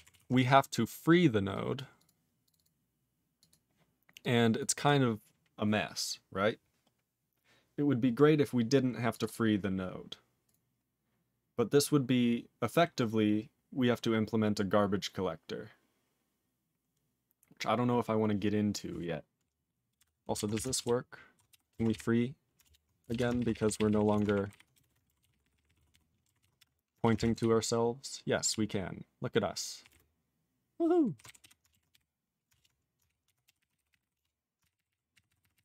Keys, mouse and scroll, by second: 0.1 ctrl+s, 1.5 click, 1.7 click, 2.0 click, 2.0 click, 2.4 click, 2.5 click, 2.5 double click, 2.6 double click, 3.4 click, 3.5 click, 4.2 click, 4.6 click, 4.8 click, 4.8 click, 9.1 click, 9.2 click, 9.3 double click, 10.4 click, 10.5 click, 13.8-14.4 scroll down 4, 15.0-16.8 scroll down 8, 16.9-17.3 scroll down 5, 17.9 scroll up 13, 18.7 click, 18.7 click, 21.5 q, 22.6 ctrl+Return, 23.1 alt+>, 23.4 ctrl+p, 23.5 ctrl+p, 23.6 ctrl+p, 23.8 ctrl+p, 23.9 ctrl+p, 24.0 ctrl+p, 24.2 alt+f, 24.5 alt+b, 24.7 BackSpace, 24.9 BackSpace, 25.2 ctrl+s, 25.3 ctrl+p, 25.4 ctrl+p, 25.5 ctrl+p, 25.7 ctrl+p, 25.8 ctrl+d, 26.0 ctrl+d, 26.4 ctrl+s, 31.4 q, 32.5 ctrl+Return, 33.2-34.5 typing, 34.7 ctrl+r, 34.9 ctrl+r, 35.1 ctrl+r, 35.3 ctrl+r, 35.4 ctrl+r, 35.5 ctrl+r.